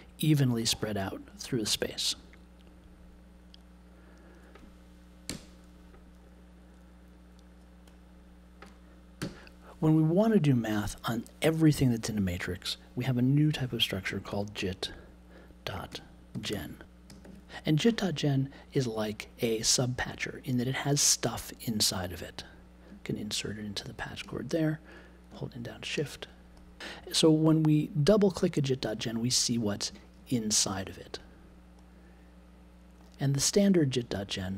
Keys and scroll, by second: 5.2 BackSpace, 9.2 n, 14.2 j, 16.3 BackSpace, 17.1 e.